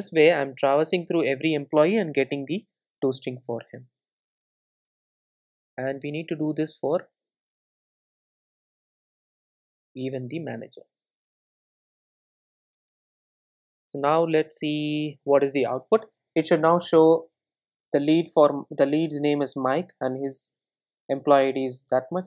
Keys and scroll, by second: 4.9 alt+Return, 9.2 super+c, 13.0 super+c, 14.4 super+v, 14.9 super+r.